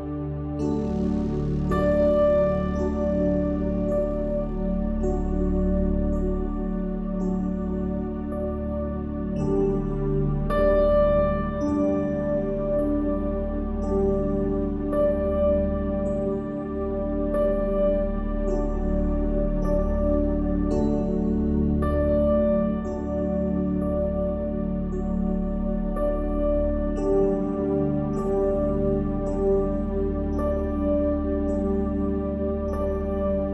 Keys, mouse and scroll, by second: 1.0-2.8 drag, 3.1 a, 4.3-6.1 drag, 7.1-10.1 drag, 9.1-11.9 typing, 12.9-15.1 typing, 13.7 middle click, 16.2 ctrl+z, 16.7 ctrl+z, 17.3 ctrl+z, 18.7 middle click, 23.1-24.9 drag, 24.3 f, 24.9-27.1 middle drag, 27.9-29.9 drag, 29.1 f, 29.9-32.3 middle drag, 31.6 Tab.